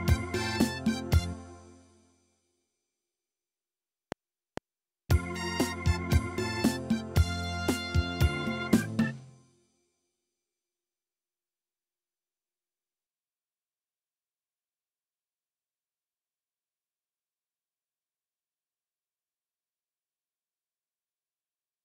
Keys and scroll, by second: 1.3 space, 9.0 space, 15.5 Escape.